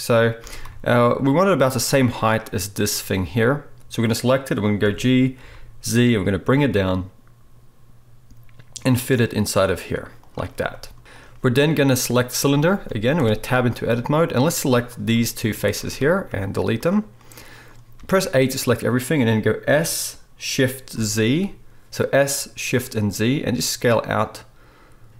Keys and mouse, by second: 0.4 s, 3.4 click, 4.8 g, 10.6 middle click, 11.0 z, 13.2 Tab, 14.3 click, 15.7 shift+click, 16.3 x, 17.4-25.1 middle drag, 18.0 a, 19.7 s.